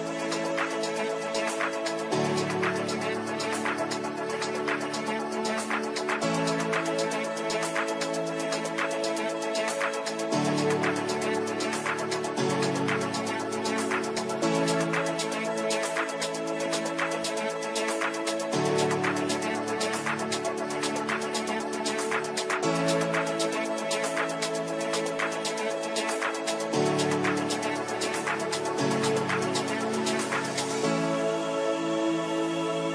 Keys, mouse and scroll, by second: 0.1-5.1 drag, 5.1 right click, 6.2 click, 14.7 click, 19.4 shift+F2, 21.0-25.2 typing, 26.4 click, 27.3 shift+click, 29.3 shift+c, 30.0 click, 31.9 shift+click.